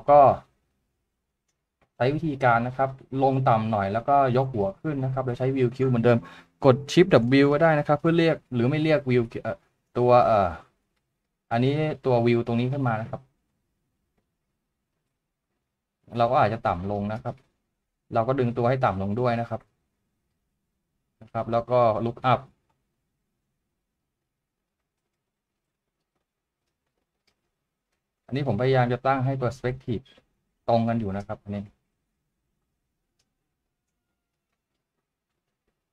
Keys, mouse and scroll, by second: 8.7-11.1 typing, 16.9 typing.